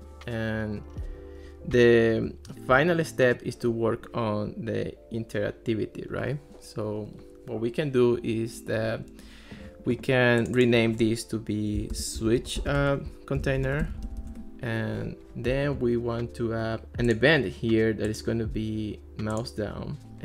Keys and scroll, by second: 11.6-14.7 typing.